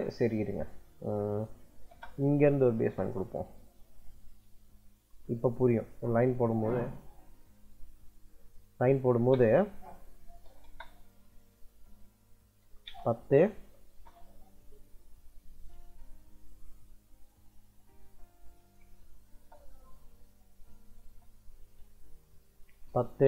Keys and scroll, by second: 1.6 l, 1.7 space, 9.0 space, 10.3 o, 10.5 space, 12.2-13.7 typing, 15.8 Escape, 17.9 c, 19.2 space, 20.8 space, 22.4-23.2 typing.